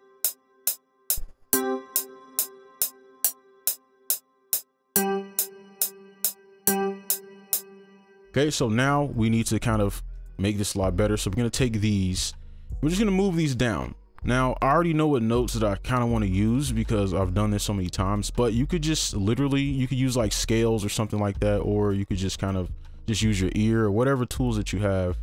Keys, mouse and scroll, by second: 7.5 space, 10.4 ctrl+click, 19.3 shift+Down.